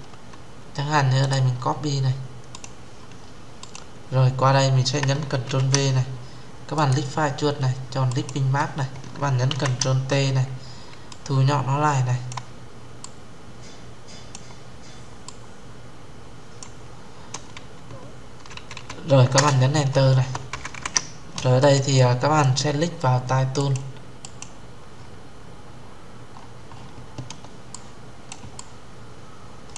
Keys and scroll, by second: 5.2 ctrl+v, 9.2 ctrl+t, 19.1 Return.